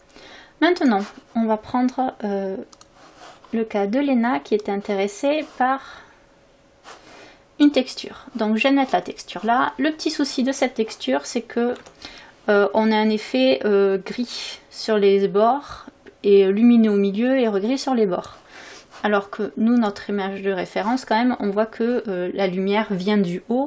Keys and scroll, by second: 6.4 ctrl+u, 11.8 v.